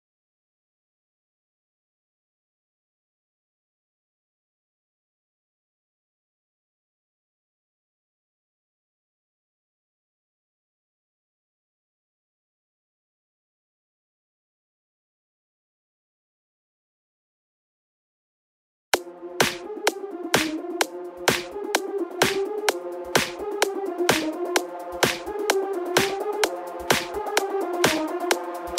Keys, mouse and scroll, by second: 8.2 shift+click, 8.7 shift+click, 9.3 shift+click, 10.2 shift+click, 10.7 shift+click, 12.0 x, 12.7-16.7 drag, 19.0 r, 25.0 KP_7, 26.6 r.